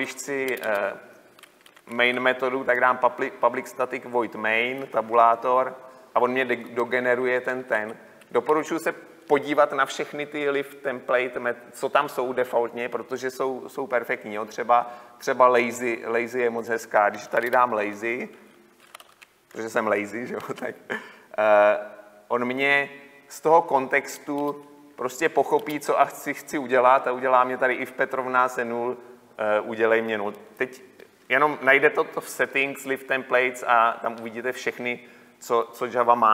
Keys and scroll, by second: 5.6 Tab, 23.3 Tab.